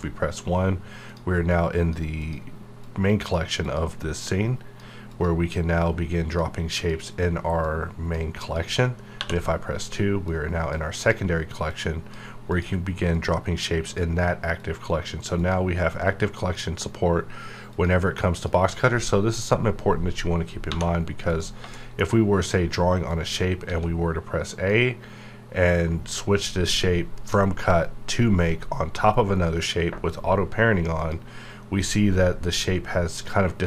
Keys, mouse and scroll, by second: 1.1-8.4 drag, 9.2 2, 10.2-17.7 drag, 20.7 1, 21.3 click, 21.7 shift+middle click, 23.0 click, 23.7 a, 31.0 click.